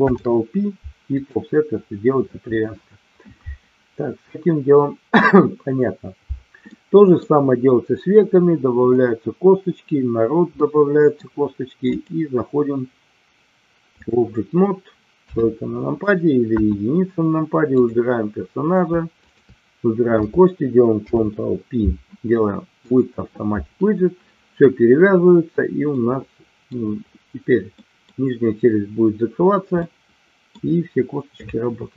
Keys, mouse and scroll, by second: 0.1 ctrl+p, 6.6 middle click, 10.5 middle click, 11.9-14.2 drag, 15.2 KP_3, 16.4 KP_1, 17.7 click, 19.3 shift+click, 20.9 ctrl+p, 25.9 middle click, 27.7 middle click, 29.8 middle click.